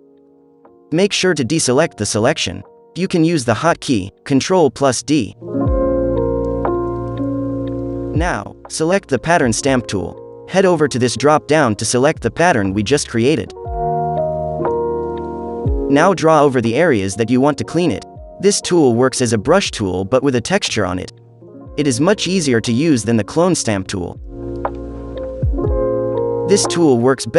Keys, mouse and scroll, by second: 0.4-1.4 drag, 3.4-4.5 drag, 5.9-7.0 drag, 8.6-10.5 drag, 10.5 middle click, 11.1-12.1 drag, 12.7-13.8 drag, 14.7-15.7 drag, 15.9-17.3 drag, 18.1 middle click, 18.1-19.0 scroll up 2, 19.0 space, 19.2 click, 21.1-24.7 drag, 23.3 space, 24.7 scroll up 2, 24.9 space, 24.9 click, 25.4 click, 26.5 click, 27.0 space.